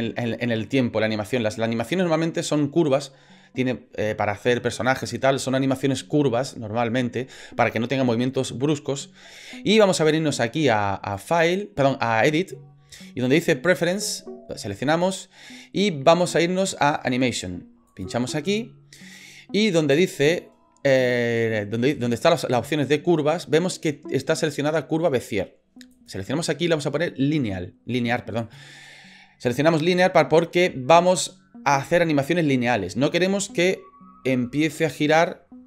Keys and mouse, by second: 11.2-14.2 drag.